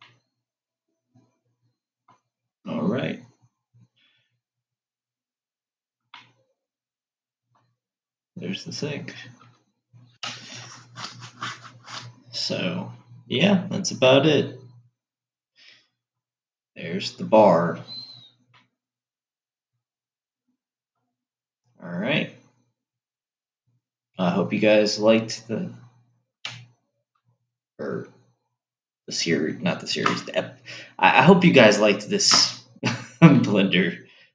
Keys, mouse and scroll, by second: 0.6-3.4 middle drag, 3.4-4.9 scroll down 5, 5.1-6.5 scroll up 7, 6.5-10.0 middle drag, 14.6-17.6 middle drag, 17.6-18.9 scroll down 7, 18.9-21.9 middle drag, 21.9-22.6 scroll up 5, 24.0-26.2 scroll down 2, 26.2-27.4 scroll down 1, 33.8-34.3 middle drag.